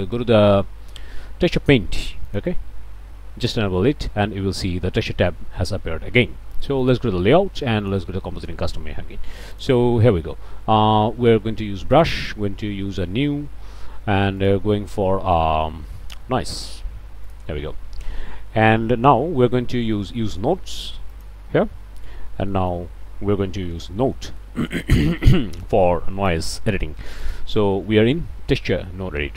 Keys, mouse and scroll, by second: 2.3 click, 6.8 click, 7.8 click, 9.5 click, 11.9 click, 14.4 click, 17.2 click, 21.1 click, 21.9-22.4 scroll up 1, 22.5 middle click, 23.6 n, 24.1 middle click, 24.4 click, 24.6 scroll up 1, 25.0 click, 25.6 click, 27.2 click.